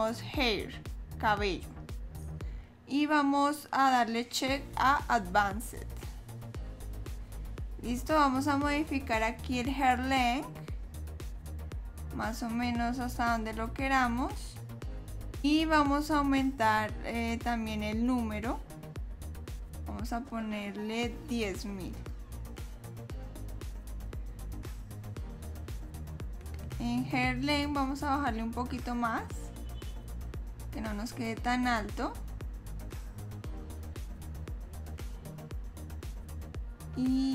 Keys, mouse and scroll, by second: 0.6 click, 5.9 click, 9.1 click, 19.4 click, 26.3 click, 33.1-33.9 scroll up 1, 33.9 middle click.